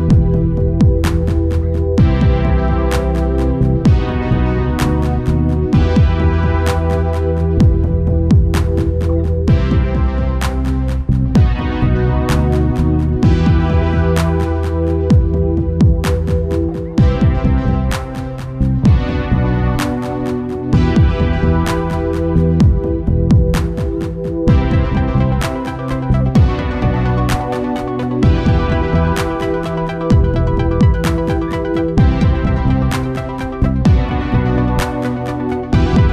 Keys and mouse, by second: 1.0 click, 16.3 click, 16.3 ctrl+s, 17.0 Tab, 17.7 Tab, 18.6 u, 21.2-34.2 drag.